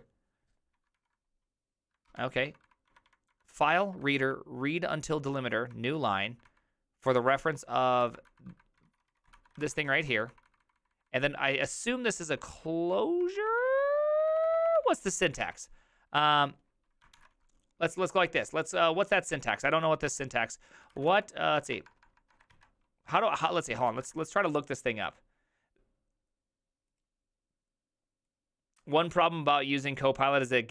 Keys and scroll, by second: 0.9 typing, 2.0 ctrl+c, 2.2-4.2 typing, 7.5-10.7 typing, 13.0-15.5 typing, 16.9-17.6 typing, 19.4 alt+{, 20.1 alt++, 20.6-22.0 typing, 22.6 alt+{, 23.9 ctrl+c, 24.0 typing.